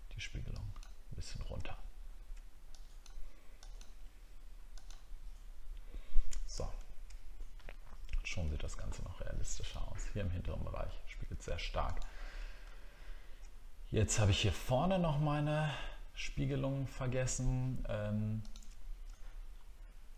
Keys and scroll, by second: 1.7-2.0 alt+scroll down 1, 2.2 alt+scroll up 1, 6.6 alt+scroll up 1, 12.6 alt+scroll up 1, 19.2-19.6 alt+scroll up 1.